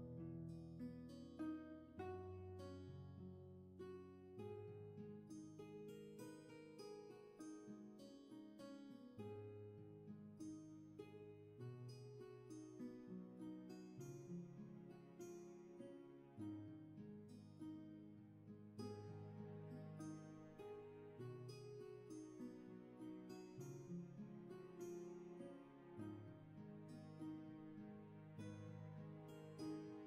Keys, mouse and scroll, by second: 0.1 ctrl+z, 8.9-9.4 scroll down 1, 9.4 space, 10.1 scroll down 1, 15.7 space, 16.6 scroll down 1, 18.4-18.9 scroll down 1, 18.9 space, 20.6 scroll up 1, 21.2 scroll down 1, 22.3 scroll up 1.